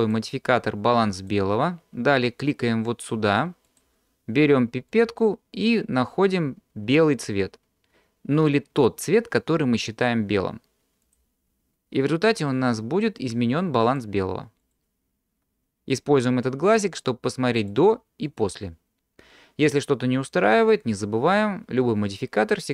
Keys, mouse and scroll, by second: 0.0-1.5 drag, 3.7 click, 14.0 click, 14.8 click, 17.7 click, 18.5 click.